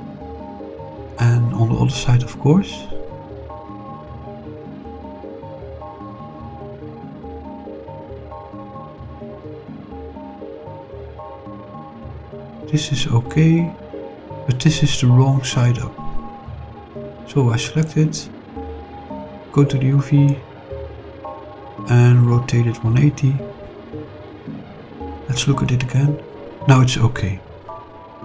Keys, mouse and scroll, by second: 1.2-2.3 middle drag, 2.7 click, 3.2 middle click, 3.9 shift+click, 5.3 click, 5.8 click, 7.3 scroll up 2, 11.5-12.0 scroll down 4, 12.3-14.2 middle drag, 14.5 scroll up 2, 15.8 scroll down 2, 16.4 click, 17.1 shift+click, 18.4 click, 20.0 click, 20.6 click, 22.2 r, 22.6 1, 23.1 8, 23.3 0, 23.9 Return, 25.5 click, 27.3 scroll down 4, 27.7-28.2 middle drag.